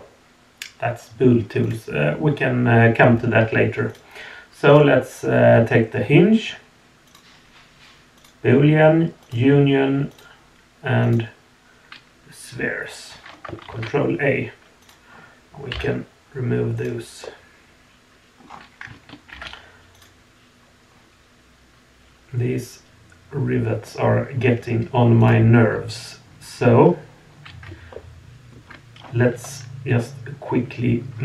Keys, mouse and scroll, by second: 1.6 click, 3.9 click, 4.7 click, 7.0-8.3 drag, 9.2 click, 10.1 click, 14.8 click, 15.7 Delete, 16.8 click, 17.2-18.4 middle drag, 18.4 scroll down 2, 19.3 alt+h, 19.9 click, 25.2 click, 27.9-28.5 shift+middle drag, 29.0-29.6 scroll down 1, 29.6 scroll up 1.